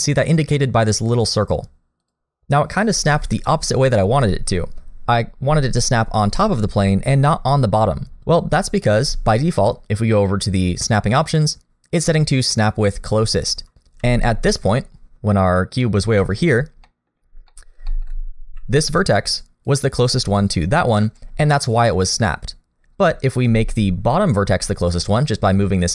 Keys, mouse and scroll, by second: 10.8 click, 14.0 g, 16.8 middle click, 17.2-17.5 scroll up 1, 17.5 middle click, 17.9 shift+middle click, 18.1-18.5 scroll up 2, 18.5 d, 19.0 click, 19.7-21.5 typing, 20.4 click, 21.5 right click, 23.4 d, 24.7 click, 24.7 d.